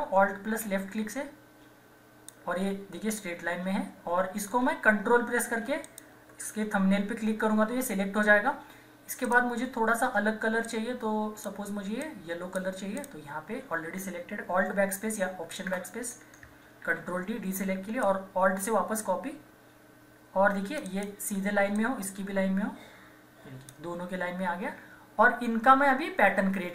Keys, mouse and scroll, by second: 9.2-12.9 drag, 15.7 alt+BackSpace, 16.8 ctrl+d, 18.0-26.7 alt+drag, 24.5 typing.